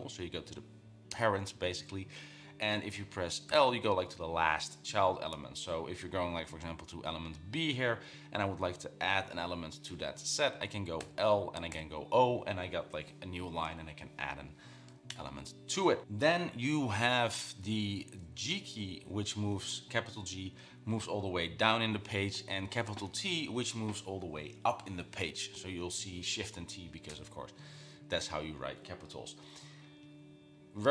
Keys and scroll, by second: 1.3 h, 6.9 j, 11.2-12.4 typing, 18.7 typing.